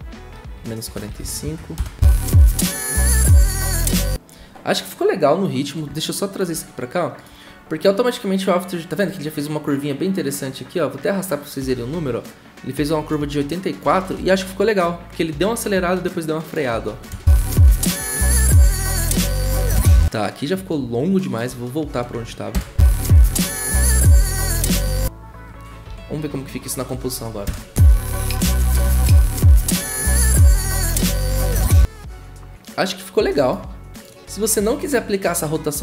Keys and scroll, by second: 0.6-1.8 typing, 17.1 0, 19.8 0, 22.5 0, 27.5 ctrl+w.